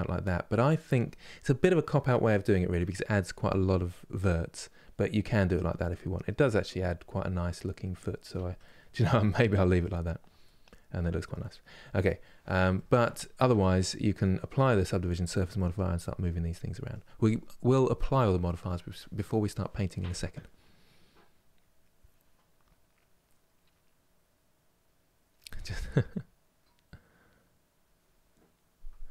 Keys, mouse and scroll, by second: 8.0 Tab, 8.3-11.9 middle drag, 11.9-12.5 scroll down 1, 12.5 middle click, 13.2 Tab, 13.6-29.1 middle drag.